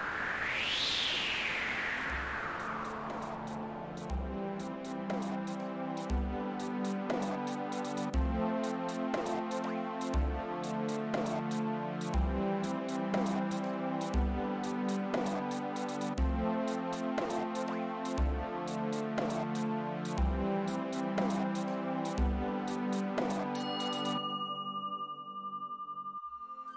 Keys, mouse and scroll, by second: 5.2-7.2 typing, 7.6 Return, 10.0 click, 13.1 click, 16.7 click, 18.5 click, 21.3 click, 22.3 click, 23.4 click.